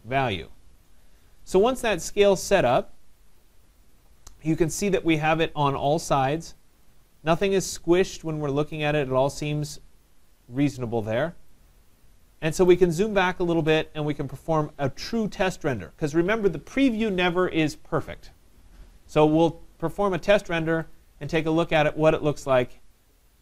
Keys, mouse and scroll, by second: 1.4 right click, 3.9 right click, 6.8 right click, 7.3 middle click, 7.4 middle click, 7.5 middle click, 8.9 middle click, 8.9 middle click, 11.5 right click, 11.5-11.9 scroll, 12.7 right click, 13.2-13.5 scroll, 14.4 right click, 14.6-15.1 scroll, 15.1 middle click, 20.0 middle click, 21.0-23.4 drag.